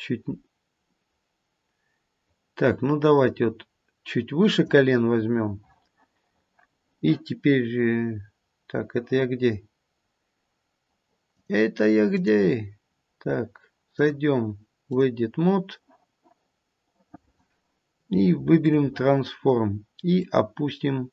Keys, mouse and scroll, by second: 11.3 click, 13.9 click, 18.6 click, 20.2 click.